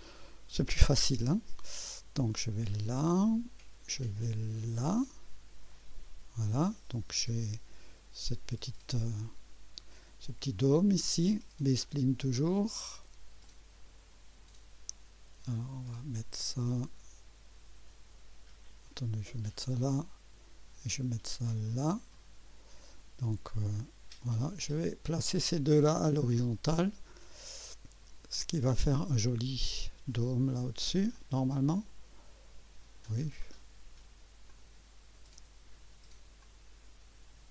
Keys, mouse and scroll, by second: 2.9 click, 5.0 click, 5.7 right click, 13.4 click, 19.3 click, 21.5 click, 22.1 right click, 23.8 right click, 24.7 click, 26.6 click, 28.4 click, 31.2-33.3 drag, 34.5 click, 36.4-37.5 drag.